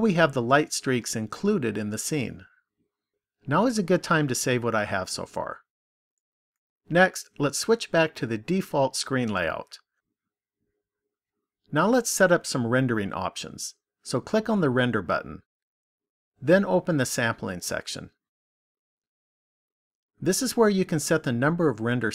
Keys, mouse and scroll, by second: 15.7 click, 17.6 click, 20.0 click.